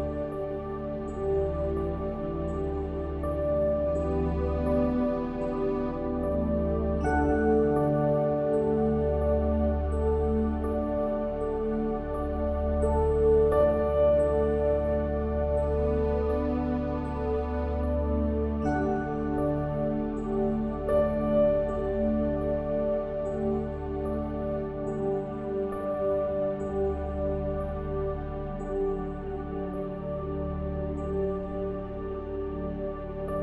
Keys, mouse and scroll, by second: 0.3 Tab, 3.5-5.3 drag, 4.0 Tab, 6.5 shift+d, 8.2-10.0 drag, 11.3 p, 12.9-14.7 middle drag, 16.0 click, 16.6-19.7 middle drag, 19.1-20.9 drag, 22.2-25.7 drag, 23.1 Tab, 25.2 middle click, 32.4-33.4 middle drag.